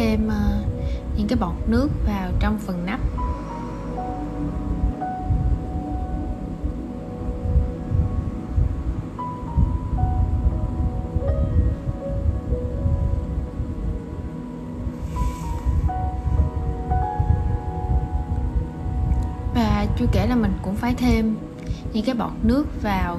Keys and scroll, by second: 21.9 super+v.